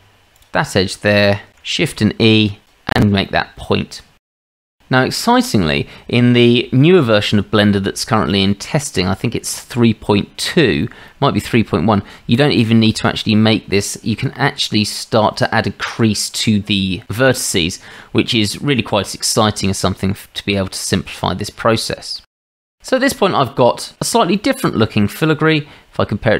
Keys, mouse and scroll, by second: 0.4-0.8 shift+drag, 1.8 shift+e, 3.3-4.0 drag, 4.3-4.6 drag, 6.9-7.9 drag, 18.4-20.1 middle drag, 21.1-22.1 shift+middle drag, 22.2 middle drag, 22.4 Tab, 22.7-23.3 middle drag.